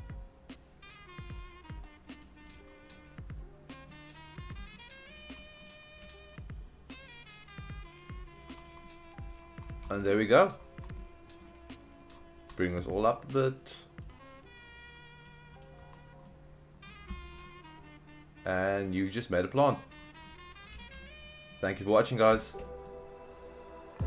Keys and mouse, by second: 2.5 click, 2.9-3.9 middle drag, 4.6 middle click, 5.1 click, 6.4-8.4 drag, 8.6 click, 8.9-9.4 middle drag, 9.9 shift+middle click, 10.1-10.5 middle drag, 11.0-11.4 middle drag, 12.5-13.1 drag, 14.1-15.2 drag, 15.6 click, 16.2-16.9 middle drag, 17.1 shift+middle drag, 17.4-18.7 middle drag, 19.0-19.8 middle drag, 20.3-20.7 middle drag, 20.8 shift+middle click, 21.1-21.5 middle drag, 21.9-22.3 middle drag, 22.4 shift+middle click, 22.7 middle drag.